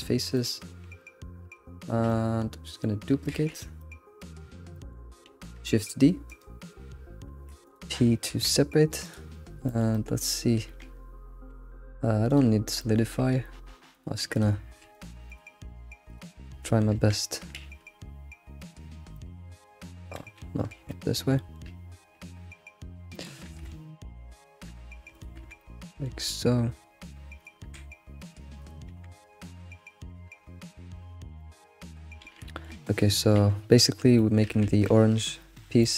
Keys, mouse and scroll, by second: 0.1 scroll, 0.3-1.8 middle drag, 1.8 shift+click, 2.1-3.3 middle drag, 3.3 alt+x, 3.8-5.3 middle drag, 5.7 shift+d, 7.9 p, 8.5 Tab, 9.1 click, 9.7 alt+middle drag, 9.7 click, 10.0 alt+middle click, 10.7 Tab, 10.8 Tab, 11.2-11.8 scroll up 3, 11.8-12.3 scroll up 1, 12.3 click, 12.8-13.2 shift+middle drag, 13.0 click, 13.2 Tab, 13.9 click, 14.3 shift+click, 14.9 click, 15.3 shift+click, 16.1 click, 16.6 shift+click, 17.2 1, 17.6 alt+x, 19.1 middle click, 19.9 scroll down 3, 20.2 ctrl+z, 20.7 alt+x, 20.9-22.8 middle drag, 23.5 alt+s, 24.8 click, 25.1 shift+click, 25.4 1, 25.6-26.7 middle drag, 26.7 click, 27.4 shift+click, 27.6 1, 28.6 shift+click, 29.0 g, 30.1 click, 30.3 g, 31.4 alt+middle click, 31.6 alt+middle click, 31.6 g, 32.5 shift+middle click, 32.7 scroll up 2, 33.3 g, 34.2 shift+middle click, 34.6 ctrl+z, 34.9-35.8 scroll down 4, 35.3 ctrl+z, 35.8 shift+middle click.